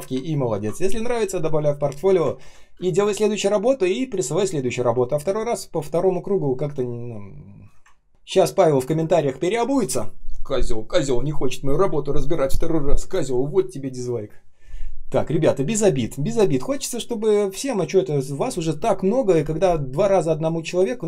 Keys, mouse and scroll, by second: 0.3 ctrl+scroll down 1, 2.4 ctrl+s, 2.8 space, 3.3 space, 3.3 space, 7.9 ctrl+scroll up 1.